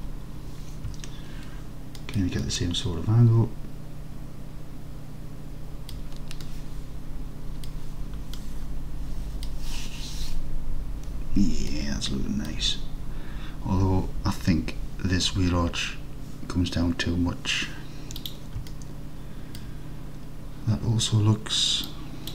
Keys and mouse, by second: 2.0 alt+click, 2.4-4.7 alt+drag, 5.2 alt+click, 6.5-7.7 drag, 8.4-9.5 drag, 11.8 alt+click, 18.2 click, 18.8-19.6 alt+drag.